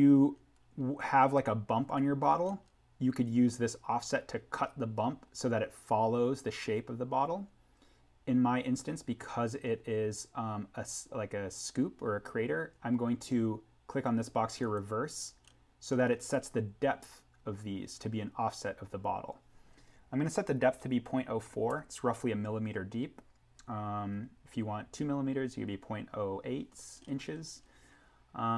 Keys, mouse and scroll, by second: 3.3-4.2 scroll up 1, 8.2-9.3 scroll down 1, 14.6 click, 15.4-16.7 scroll up 1, 18.6 scroll down 1, 21.7 Tab, 24.1-25.3 scroll down 1, 27.0-27.7 scroll up 1.